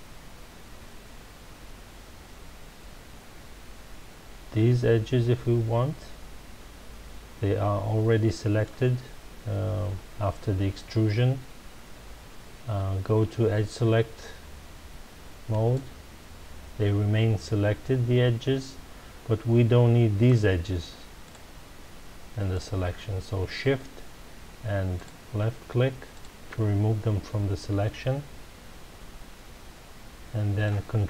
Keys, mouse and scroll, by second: 15.5 click, 20.2 shift+click, 21.2 shift+click, 22.5 shift+click, 24.9 shift+click, 26.1 shift+click, 27.8-30.8 middle drag.